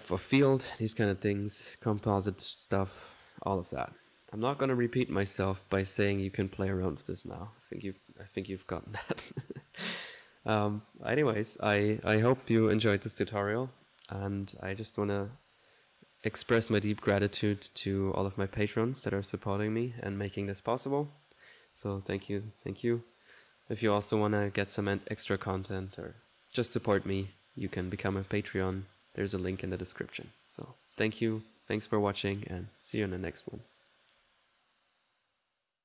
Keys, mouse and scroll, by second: 1.1-3.8 drag, 4.3-5.4 drag, 6.1 click, 7.3 click, 9.0 click, 9.8 click.